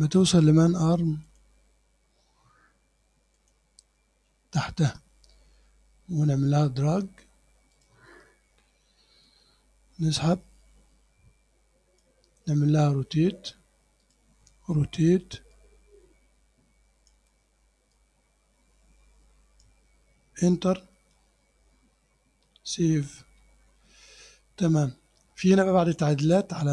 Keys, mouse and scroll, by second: 0.5 click, 1.3 click, 3.4 click, 7.8 click, 9.3-12.2 drag, 14.1 click, 15.6-17.3 drag, 18.0-19.9 drag, 21.3 Return, 23.4 ctrl+s.